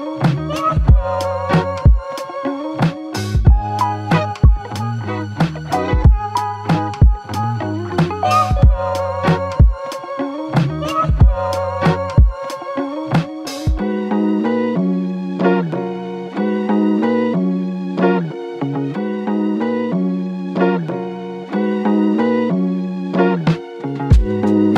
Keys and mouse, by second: 22.0 alt+click, 23.1-24.4 typing.